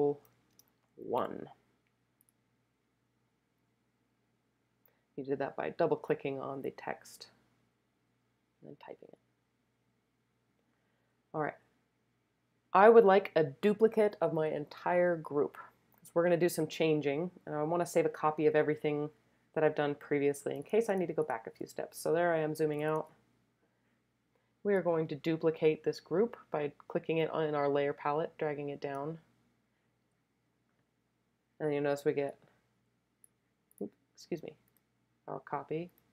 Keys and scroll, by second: 0.0-1.2 typing, 20.5 space, 21.0 space, 21.1 space, 22.2 space, 22.8 space.